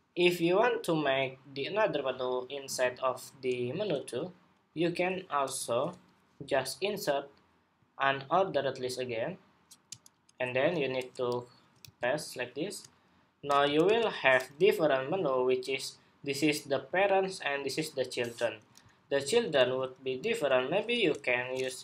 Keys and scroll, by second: 11.5 super+v.